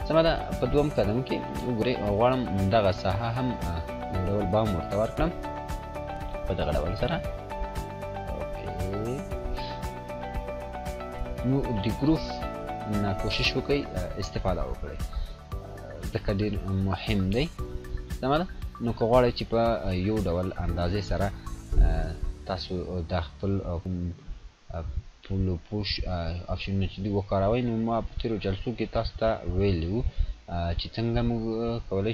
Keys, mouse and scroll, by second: 6.7 click, 10.0 click, 19.4-21.4 drag, 22.4 ctrl+z, 24.4 click.